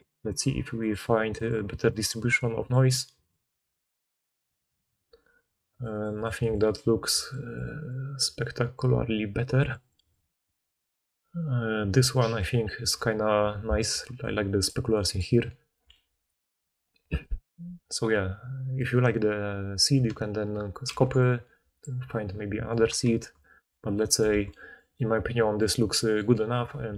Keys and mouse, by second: 13.8-14.8 d, 15.2 d, 15.7 d, 17.1-17.5 drag, 17.1-17.5 middle drag, 17.1-17.5 right drag, 20.8 ctrl+c, 23.0 ctrl+z, 24.3 alt+a.